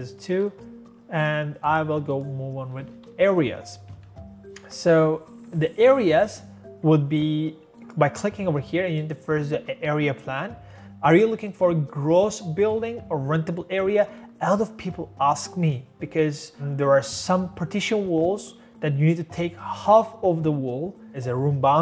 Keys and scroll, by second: 0.4 2, 2.0 2, 2.9 Escape, 3.1 Escape.